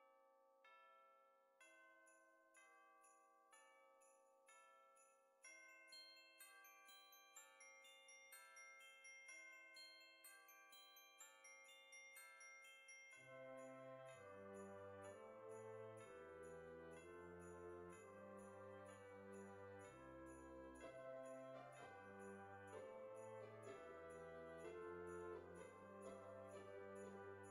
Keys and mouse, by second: 0.5 click, 1.2 middle click, 3.4 click, 6.5 click, 7.9 click, 8.9 KP_5, 9.5 middle click, 15.5 click, 16.9 click, 19.6 click, 21.0 KP_1, 23.1 click, 23.3 KP_7, 26.9 click.